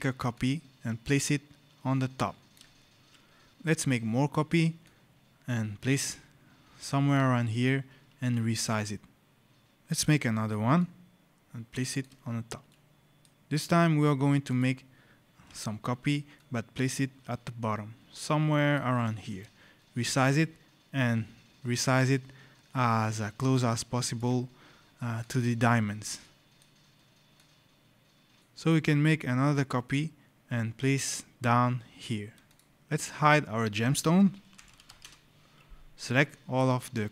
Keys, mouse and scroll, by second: 0.2 alt+click, 4.7 alt+click, 8.4 shift+click, 9.8 right click, 10.6 alt+click, 12.6 right click, 12.8 click, 13.4 click, 16.2 alt+click, 19.0 alt+click, 19.8 shift+click, 24.5 scroll, 25.1 click, 26.1 right click, 26.2 scroll, 27.2 click, 28.4 click, 29.8 click, 32.0 alt+click, 32.4 click, 32.7-33.1 scroll, 33.1 click, 34.0-35.2 typing, 36.0 click.